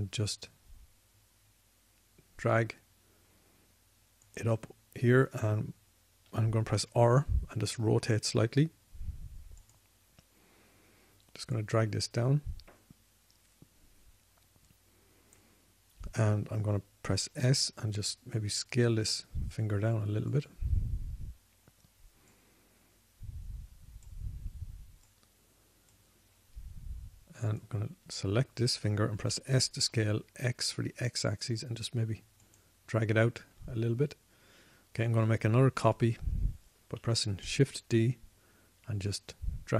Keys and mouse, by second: 7.6 r, 11.7-14.6 middle drag, 18.6 s, 21.9 middle drag, 23.5 middle click, 30.6 s, 39.0 shift+d.